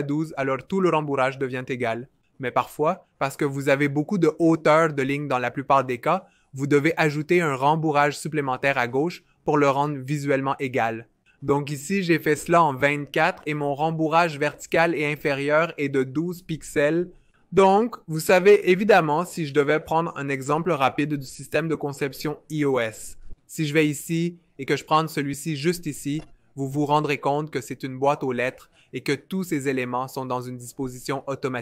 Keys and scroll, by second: 0.0-0.4 typing, 7.1 Up, 12.6-13.1 typing.